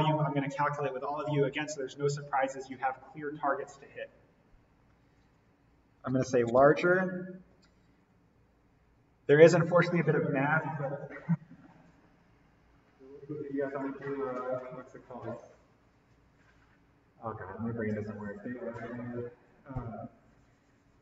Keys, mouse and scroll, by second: 5.3 click, 5.9-7.3 typing, 8.0 click.